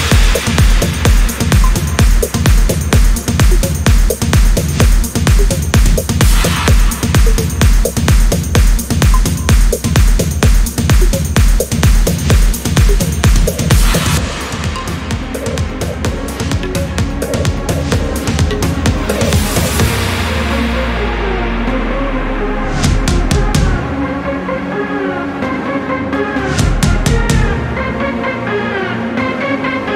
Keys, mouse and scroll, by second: 0.3 4, 0.9 0, 2.4 click, 4.8 click, 5.3 space, 5.8 click, 6.5 space, 7.2 click, 9.3 click, 10.7-11.9 drag, 12.7 click, 13.7 click, 18.5 click, 19.7 click, 20.7 click, 22.6 click, 23.6 click.